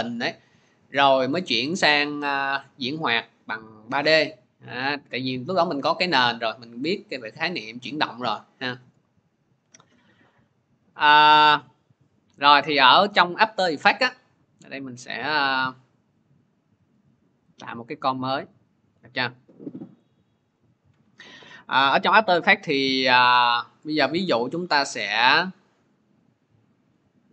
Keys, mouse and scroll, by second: 15.3 click, 17.4 click, 20.5 click, 22.5-27.3 drag.